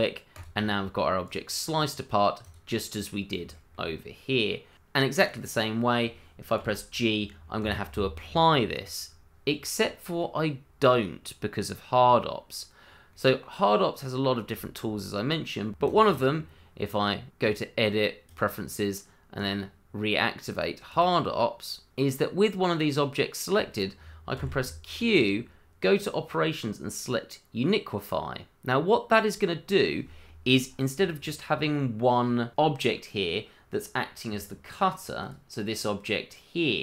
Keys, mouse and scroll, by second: 0.3 click, 0.7 middle click, 1.6-2.4 scroll down 1, 2.4 click, 2.8 middle click, 3.5 shift+middle click, 3.6 middle click, 4.2 shift+middle click, 4.3 middle click, 4.8 shift+middle click, 5.0 scroll up 1, 5.2 middle click, 5.7 click, 5.9 middle click, 6.6 g, 7.6 Escape, 10.2 middle click, 12.8 scroll up 1, 13.1 middle click, 15.7 Escape, 15.8 click, 17.4 click, 20.5 double click, 24.3 q, 34.0 scroll down 1, 35.2 click, 36.2 middle click.